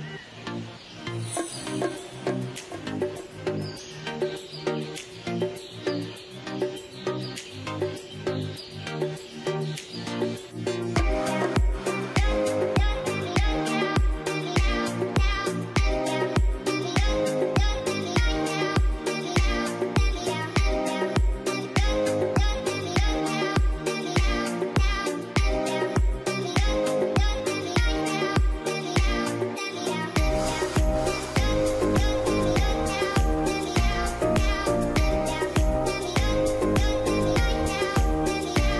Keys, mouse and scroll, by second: 0.5 scroll down 1, 1.0 alt+middle click, 4.5 ctrl+a, 15.0 double click, 19.9 scroll up 1, 20.3 middle click, 20.7 F3, 21.1 scroll up 1, 21.6 scroll down 1, 21.6 middle click, 26.4 middle click, 35.5 middle click.